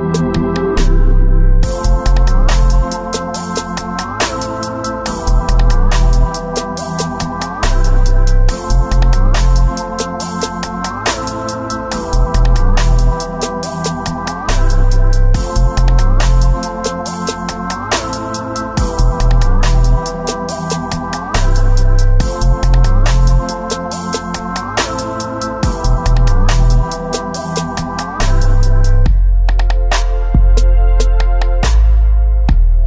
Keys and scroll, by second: 8.8 ctrl+z, 10.7 ctrl+z, 11.4 ctrl+z, 11.7 space, 14.2 space, 14.8 space, 15.1 space, 19.0 space, 19.8 space, 21.6 space, 22.2 space, 29.1 space, 31.6 space, 32.2 space.